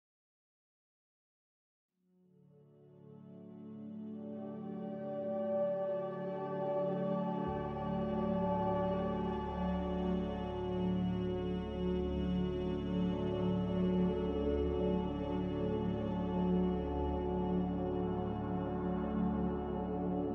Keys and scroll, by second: 4.4 n, 5.6 Escape, 11.2-11.7 typing, 12.1 Return, 13.5 m, 16.0 Escape, 16.4 Escape, 16.4 z, 18.4 z, 20.0-20.3 typing.